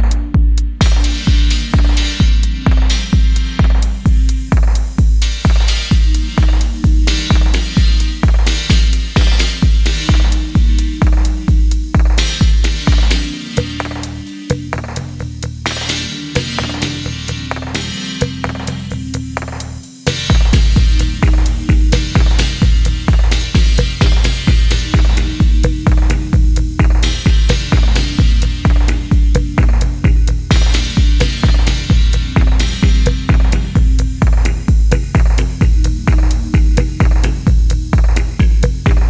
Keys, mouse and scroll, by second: 4.5 shift+middle click, 8.6 scroll down 1, 9.2 middle click, 12.1 scroll up 1, 19.9 double click, 23.4 middle click, 25.6 middle click, 30.3-30.8 scroll up 1, 30.9 shift+middle click, 33.6 middle click, 38.0-38.6 scroll down 1, 38.7 middle click.